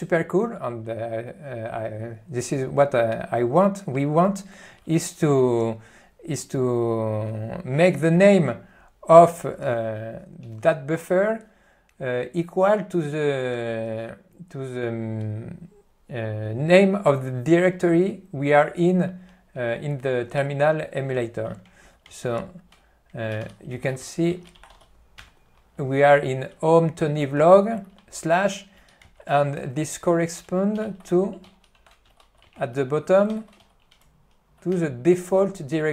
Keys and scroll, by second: 22.2 alt+:, 23.5 ctrl+g, 24.0-24.9 typing, 29.1 alt+:, 33.8 Tab, 34.8 Return.